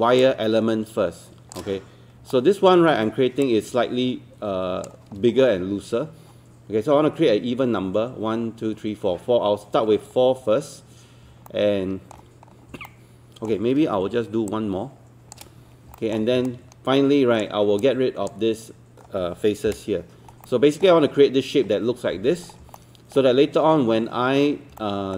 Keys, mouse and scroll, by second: 0.2 shift+click, 2.3 alt+middle click, 3.5 shift+click, 5.3-6.0 scroll down 1, 11.5 alt+middle click, 12.5 scroll up 1, 12.9 alt+middle click, 14.5 shift+click, 16.5 right click, 17.8-19.0 drag, 19.7 Delete, 20.5 alt+middle click, 22.4 scroll down 1, 22.8 alt+middle click, 24.8-25.1 alt+middle drag.